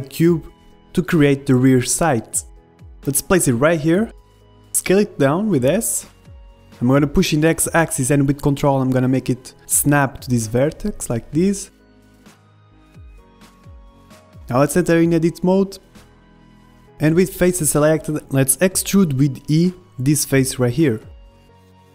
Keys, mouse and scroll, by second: 0.6 shift+a, 3.0-6.0 drag, 5.0 s, 6.4-9.5 middle drag, 8.1 s, 9.7-11.6 drag, 11.4 g, 14.0-15.7 middle drag, 14.8 Tab, 15.2 a, 15.6 b, 15.9-17.5 drag, 16.9 middle click, 17.5 ctrl+Tab, 18.8 KP_1, 19.3 e.